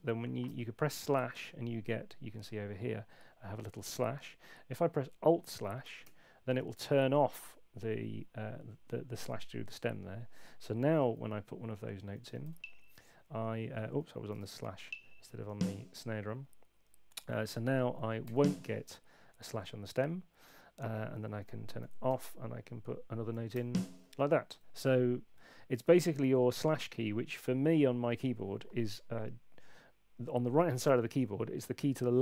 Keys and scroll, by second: 12.0-12.9 typing, 14.4 super+z, 14.8 Up, 18.3 y.